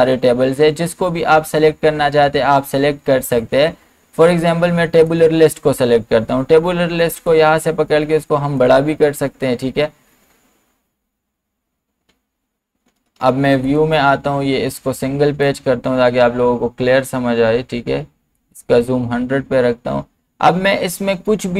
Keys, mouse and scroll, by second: 13.6 click, 18.4 click.